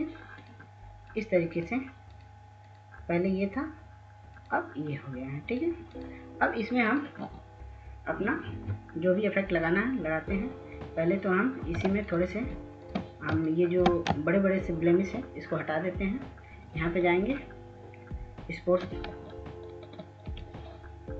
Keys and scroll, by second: 12.1 ctrl+space, 12.5 ctrl+space, 12.7-13.5 ctrl+space, 14.0 ctrl+space, 19.3 ctrl+s, 19.5 ctrl+s, 19.9 ctrl+s, 20.3 ctrl+s.